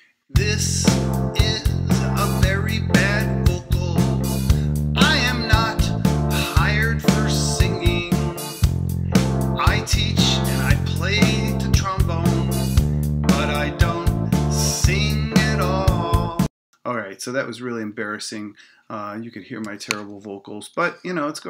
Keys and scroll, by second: 16.5 space.